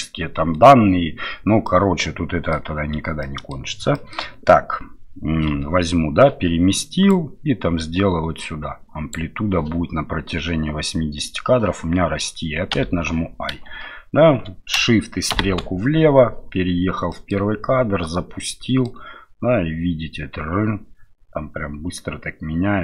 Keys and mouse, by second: 1.6 middle click, 3.2 middle click, 3.9 shift+middle click, 7.2-9.1 drag, 12.7 i, 15.3 shift+Left, 17.1 middle click, 17.5 space, 18.4 middle click.